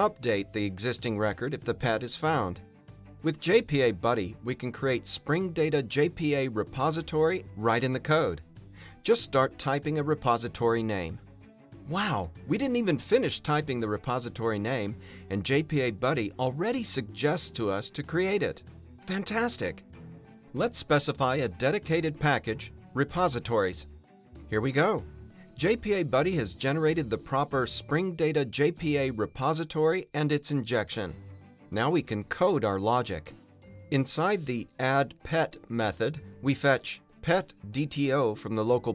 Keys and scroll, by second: 2.5 Return, 21.7 Return, 22.6 alt+BackSpace, 31.5 Return, 33.2 alt+Return, 34.0 alt+Return.